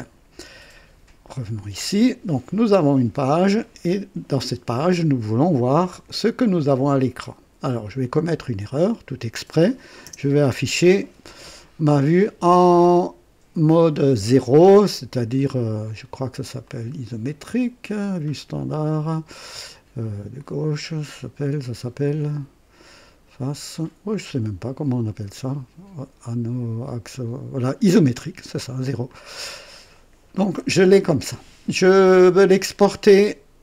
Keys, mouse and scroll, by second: 1.3 click, 8.9 click, 10.1 KP_0, 16.7 click, 29.1 click.